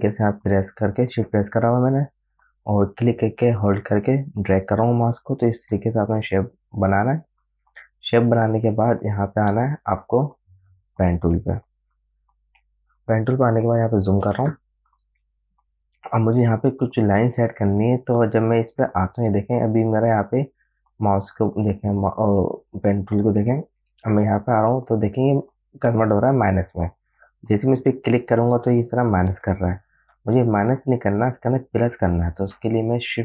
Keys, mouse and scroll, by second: 0.1-9.5 shift+drag, 9.8 click, 10.2 right click, 11.4 click, 13.5 alt+scroll up 1, 14.8 space, 15.0 click, 15.3 space, 28.2 click, 30.9 ctrl+z.